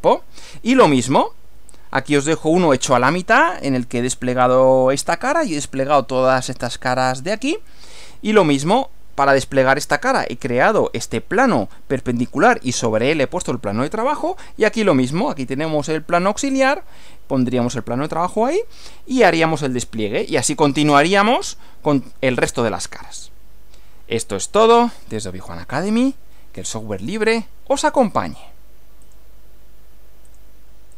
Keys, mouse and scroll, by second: 1.5 Right, 29.1 click, 30.3 click, 30.9 click.